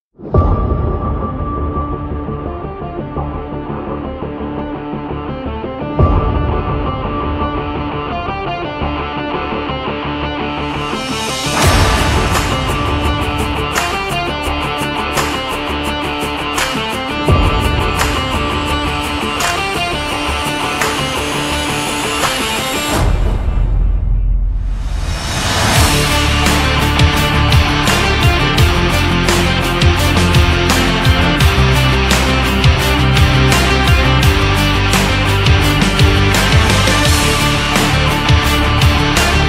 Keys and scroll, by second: 0.8 BackSpace, 2.3 BackSpace, 3.5 BackSpace, 5.1 ctrl+f, 12.6 ctrl+0, 12.8 ctrl+-, 28.3 shift+Up, 30.4 Up, 32.2 Up, 36.2 Up.